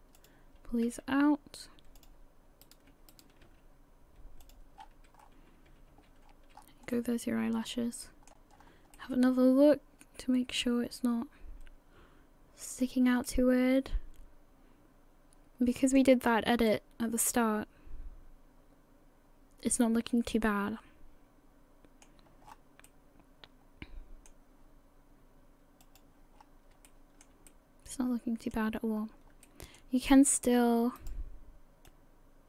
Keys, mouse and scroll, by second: 0.2 click, 0.9 g, 2.6 right click, 3.1 shift+right click, 3.5 g, 4.8-5.7 scroll down 12, 5.7 a, 5.9 a, 6.3-6.6 scroll down 2, 6.6-7.0 scroll up 3, 6.9 middle click, 8.5-8.9 scroll up 2, 8.9 middle click, 13.2 middle click, 13.2 scroll up 1, 16.2-16.7 scroll up 4, 16.7 middle click, 22.4-22.9 scroll down 7, 22.9 middle click, 25.8 click, 26.3 scroll up 4, 26.8 shift+middle click, 27.5 middle click, 29.0-29.3 scroll up 1, 29.4 shift+middle click, 30.0 middle click, 31.0 right click, 31.9 click.